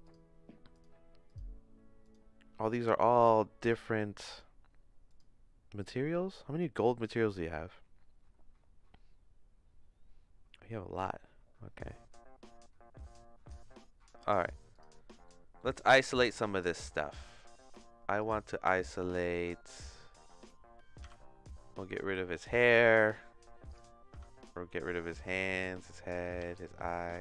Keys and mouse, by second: 0.0 click, 1.3 click, 3.6 click, 4.3 click, 5.0 click, 5.8 click, 15.2 middle click, 16.1 shift+middle click, 18.1 click, 21.0 h, 22.8 shift+middle click, 23.7 click, 25.2 click, 25.4 h, 26.2 click, 26.4 h, 26.9 click, 27.1 h.